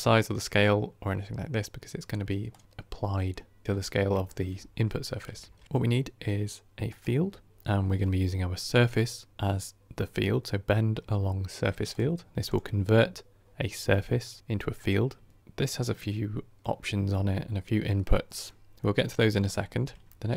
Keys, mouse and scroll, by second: 3.6-4.1 scroll up 4, 4.1-20.3 shift+middle drag.